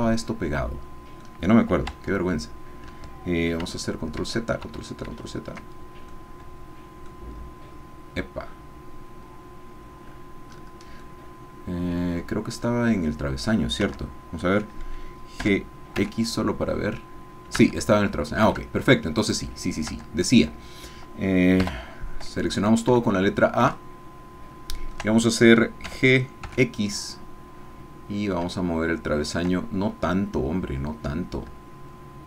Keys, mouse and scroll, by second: 1.9 Tab, 4.2 ctrl+z, 6.1-7.3 drag, 7.3-7.7 scroll down 2, 9.6-10.1 scroll down 2, 10.1-10.8 scroll up 4, 11.1-13.6 middle drag, 13.9 Tab, 15.4 g, 16.0 x, 17.6 Escape, 18.4 Tab, 19.3 click, 19.9 Tab, 21.6 a, 23.0-24.3 ctrl+middle drag, 23.6 ctrl+click, 24.3-25.4 shift+drag, 25.9 g, 26.4 x.